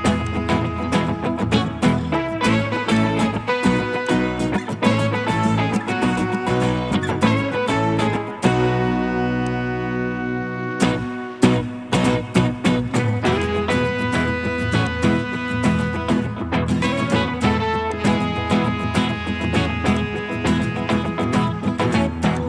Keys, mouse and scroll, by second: 0.4-1.2 typing, 0.7 middle click, 5.3 scroll up 1, 5.6 scroll down 1, 6.0 middle click, 6.9 right click, 15.6 middle click.